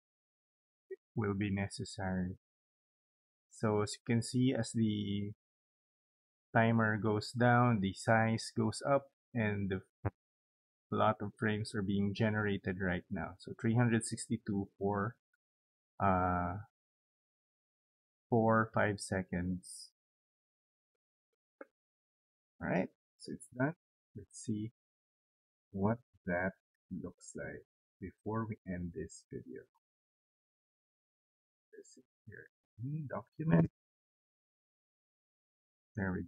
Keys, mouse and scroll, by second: 24.9 click, 26.0 click, 31.1 click, 32.5 click, 32.6 click, 34.6 click.